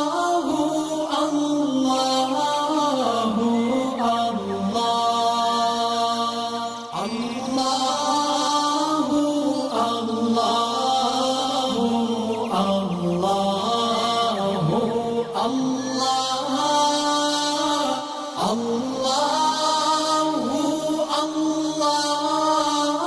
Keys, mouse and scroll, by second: 0.0 space, 0.1 click, 1.3 space, 1.5-3.1 drag, 4.2 right click, 4.2 right click, 5.6 click, 6.5 alt+scroll up 1, 7.0 alt+shift+click, 7.4-8.1 alt+shift+drag, 9.9 alt+scroll up 1, 10.0-12.6 drag, 13.5-16.7 shift+drag, 17.3 alt+scroll down 1, 17.8 scroll up 2, 18.0 click, 19.7 right click, 20.5-22.9 drag.